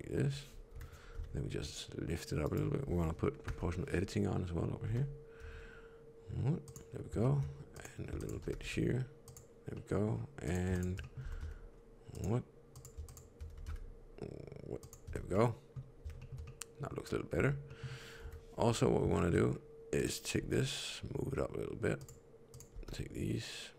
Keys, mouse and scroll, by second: 0.6 KP_3, 1.0 g, 3.4 o, 4.8 g, 6.9 scroll down 1, 7.1 shift+middle click, 7.7 click, 8.1 shift+click, 8.3 g, 9.7 middle click, 10.4 click, 10.6 shift+click, 10.9 middle click, 11.1 s, 12.6 click, 13.0 shift+click, 13.4 s, 15.0 Tab, 15.3 middle click, 16.1 shift+middle click, 16.3 middle click, 17.3 Tab, 17.6 middle click, 18.1 KP_3, 18.6-19.5 scroll up 5, 19.1 shift+middle click, 19.9 click, 20.3 g, 22.4 click, 22.6 g.